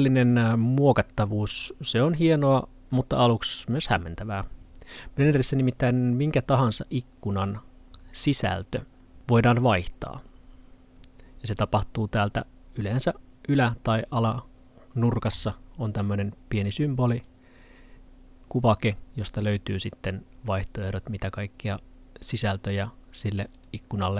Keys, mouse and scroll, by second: 15.4 click.